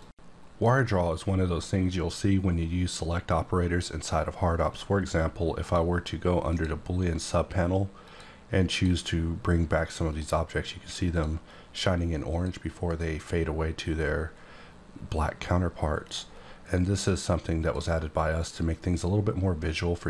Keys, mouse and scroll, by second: 5.6 click, 6.4 click, 8.0 click, 8.7 click, 10.1 click, 11.1 click, 12.3 click, 16.0 click, 16.9 click, 17.5 click.